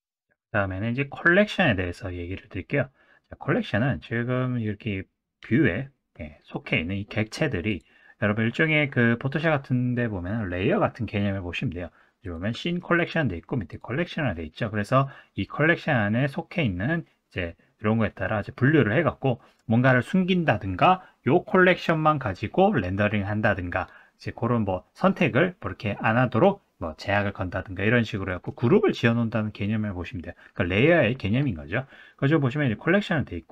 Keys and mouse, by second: 12.2 click.